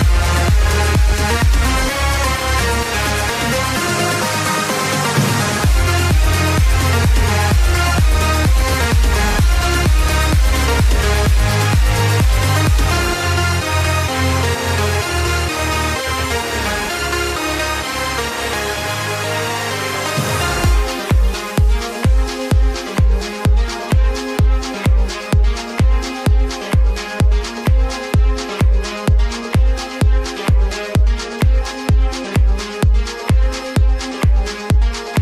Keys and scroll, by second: 28.6 space.